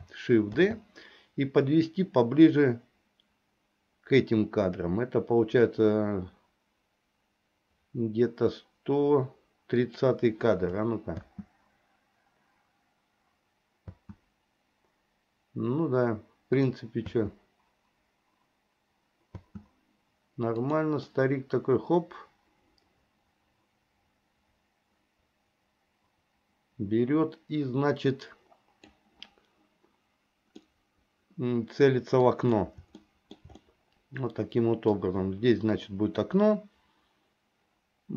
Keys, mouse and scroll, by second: 0.6 shift+d, 11.2 space, 14.0 space, 16.7 click, 17.2 space, 19.4 space, 20.7 click, 21.3-29.0 drag, 30.7-32.4 middle drag, 33.1 shift+middle click, 33.8-35.1 middle drag.